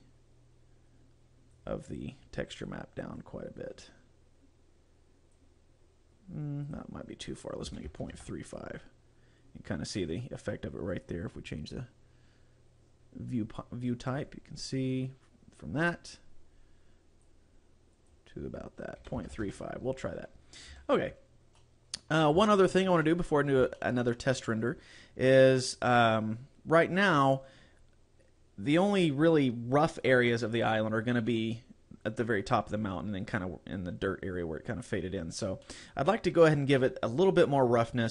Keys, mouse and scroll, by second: 2.7 click, 3.2 click, 6.7 click, 11.0 click, 14.3 click, 16.0 click, 20.7 a, 21.6 middle click, 22.6 shift+middle click, 23.0 middle click, 23.8 shift+middle click, 25.6 right click, 35.6 middle click.